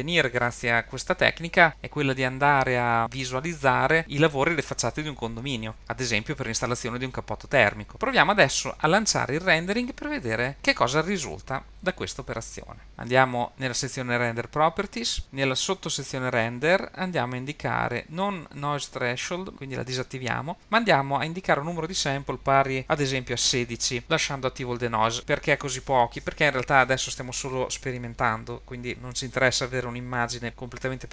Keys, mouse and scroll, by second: 19.5 click, 22.3-24.0 drag.